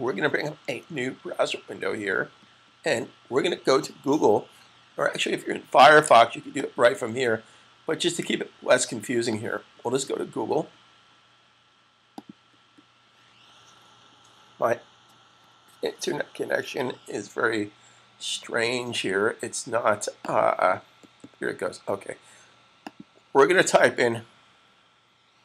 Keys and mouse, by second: 0.8 super+click, 1.7 super+t, 6.3 click, 9.2 click, 12.0 click, 20.1 click, 22.6 click.